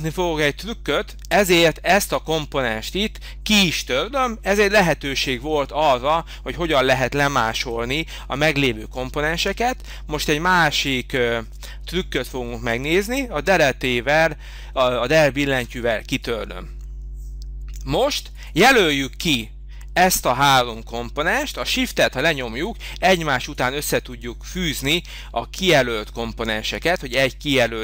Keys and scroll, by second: 1.3 space, 15.6 Delete.